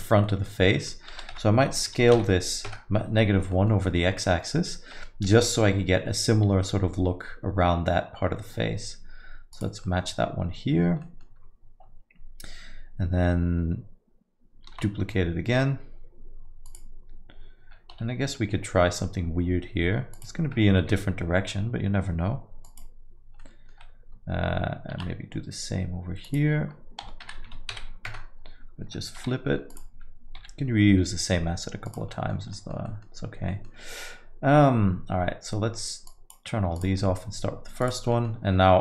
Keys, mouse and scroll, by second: 0.3 middle click, 0.8 middle click, 1.2 s, 3.5 middle click, 4.2 middle click, 5.3 g, 9.9 middle click, 11.0 middle click, 15.2 shift+d, 20.8 r, 20.8 g, 23.4 middle click, 25.0 shift+d, 27.0 s, 29.2 r, 30.4 g, 32.2 middle click, 32.4 scroll down 1, 32.6 middle click, 32.9 middle click, 33.5 middle click, 36.1 click, 36.8 click, 37.1 middle click, 37.8 click, 38.1 middle click.